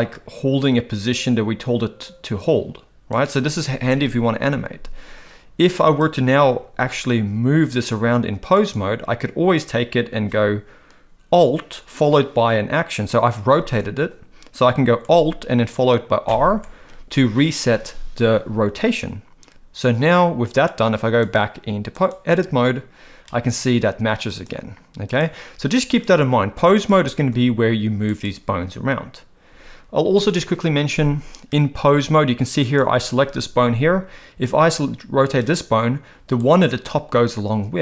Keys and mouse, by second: 6.1 click, 6.5 r, 16.3 alt+r, 21.3-22.1 drag, 24.5-25.2 drag, 27.1 r, 32.7 click, 35.2 r.